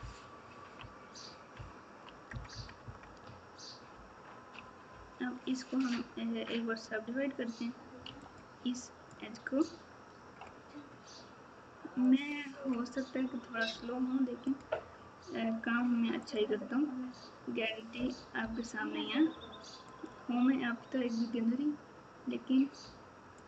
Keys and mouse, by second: 0.4 ctrl+KP_6, 2.3 ctrl+KP_Add, 2.8 KP_Add, 3.9 ctrl+KP_2, 4.4 ctrl+KP_2, 8.0 2, 14.6 q, 15.5 1, 23.3 click.